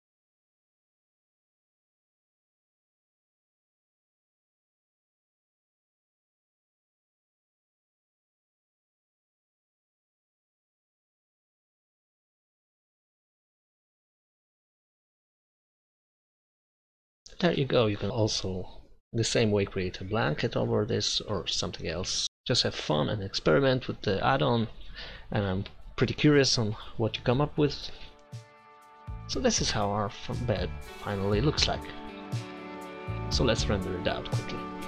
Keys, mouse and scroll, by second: 3.3 click, 5.3 Tab, 6.0 a, 6.2 a, 6.5 u, 7.6 Tab, 8.4 click, 9.6-11.2 drag, 12.2 click, 13.7 Tab, 14.3 u, 15.5 Tab, 16.3 KP_0.